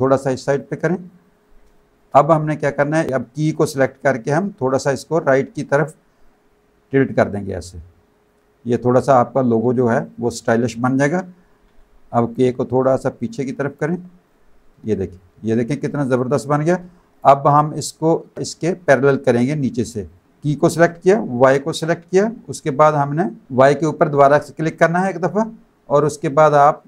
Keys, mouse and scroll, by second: 0.5 click, 1.0 alt+click, 1.6 space, 1.7 click, 3.6 click, 4.3 click, 6.2 click, 9.0 click, 12.2 click, 14.2 click, 14.8 space, 14.9 click, 17.8 click, 20.0 shift+click, 21.4 shift+click, 24.7 click.